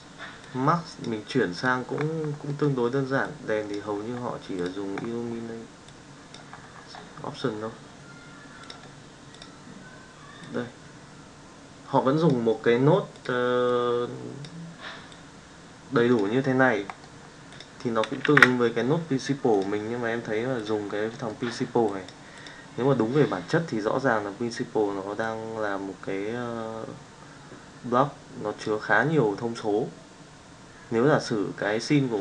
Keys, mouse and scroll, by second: 18.2 shift+a, 21.0 middle click, 21.8 click, 25.5-28.8 drag.